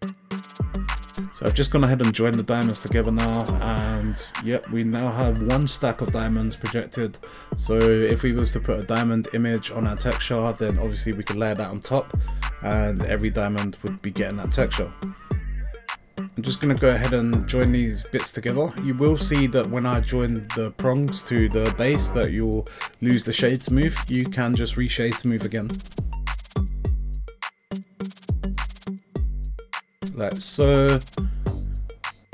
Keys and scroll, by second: 1.5 Tab, 1.8 a, 3.2 g, 8.1 g, 10.2 g, 10.9 s, 13.0 g, 18.2 Tab.